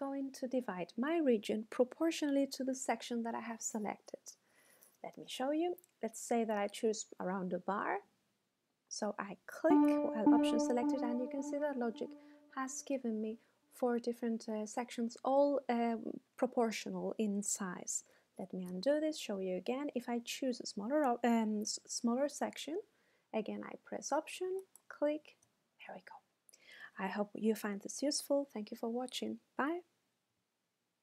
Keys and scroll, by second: 18.4 super+z.